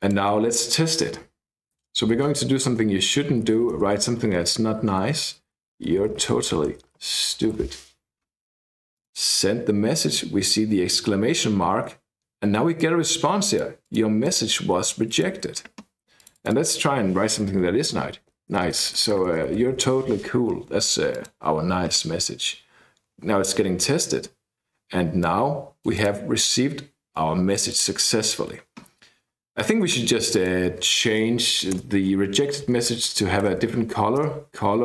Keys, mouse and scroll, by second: 0.0 click, 1.6-4.1 typing, 2.7 Return, 5.7-8.1 typing, 9.0 click, 12.8-14.5 drag, 15.1 click, 16.2 click, 18.3 Right, 18.5-20.4 typing, 21.1 click, 25.2-26.4 drag, 27.1 click, 28.2 click, 30.3 click, 31.6 ,, 31.8 Return, 32.7-33.6 typing, 34.2 Return.